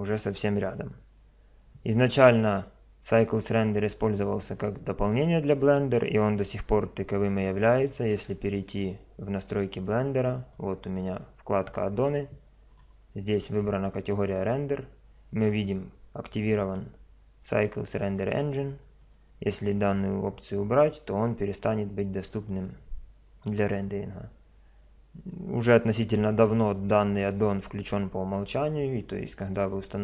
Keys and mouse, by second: 7.8 click.